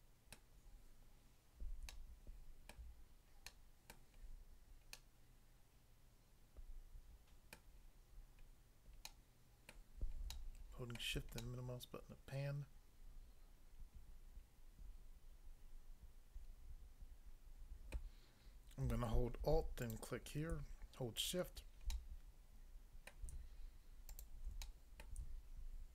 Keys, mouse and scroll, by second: 0.3 middle click, 1.9 shift+middle click, 4.2 scroll down 1, 5.0 middle click, 7.6 middle click, 8.4-8.8 scroll up 1, 9.0 middle click, 9.7 middle click, 10.4 shift+middle click, 17.9 middle click, 19.8 alt+click, 19.9 alt+click, 21.9 middle click, 23.1 middle click, 24.1 alt+click, 24.7 middle click, 25.0 middle click.